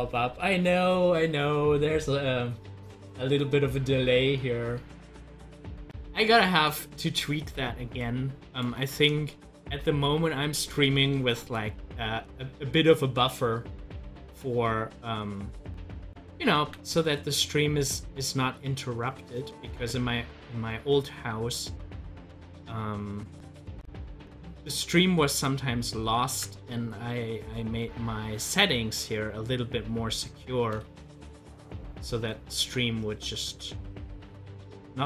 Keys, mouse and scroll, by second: 6.5 click, 8.9 ctrl+z, 15.1-16.6 drag, 16.6 ctrl+z, 19.6 ctrl+z, 22.5 ctrl+z, 26.3 ctrl+z, 34.2 ctrl+z.